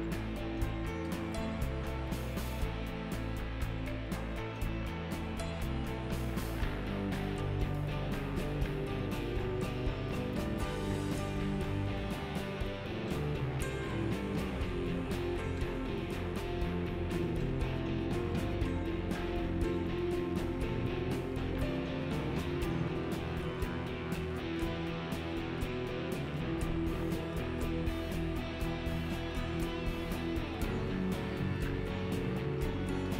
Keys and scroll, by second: 4.1 s, 5.1 space, 24.1 1, 31.9 Delete.